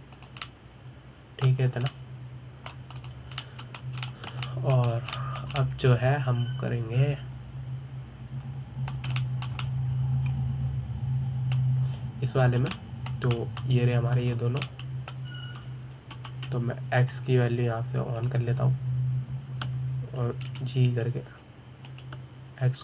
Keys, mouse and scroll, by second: 0.3 click, 0.8 g, 2.1-3.4 middle drag, 3.4 scroll down 3, 3.6-4.6 middle drag, 4.6 click, 5.1-6.6 middle drag, 6.6 scroll up 2, 6.8-10.3 shift+middle drag, 10.8-14.3 shift+middle drag, 14.4-15.9 middle drag, 15.9 click, 16.3-17.8 middle drag, 17.8 KP_7, 19.9 click, 22.2 g.